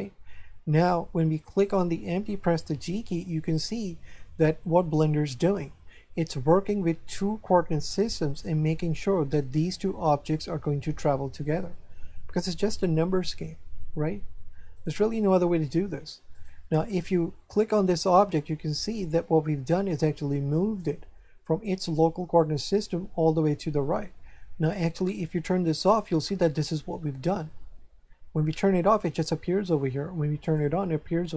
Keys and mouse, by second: 1.5 right click, 2.8 g, 14.7 right click, 16.3 right click, 25.8 click, 30.4 click.